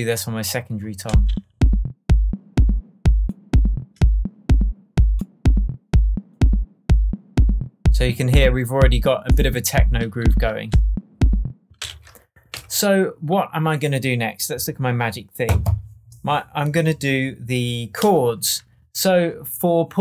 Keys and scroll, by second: 1.0 space, 11.6 space, 11.8 super+s, 12.4 super+Tab, 13.1 Tab.